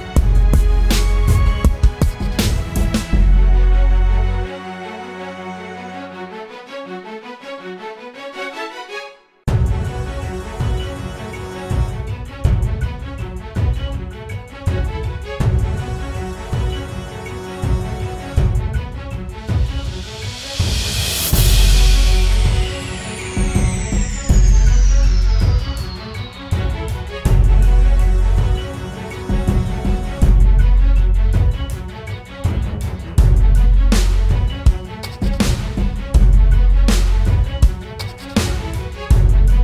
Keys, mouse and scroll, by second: 23.0 alt+click, 34.1 right click, 36.1 typing, 36.7 double click.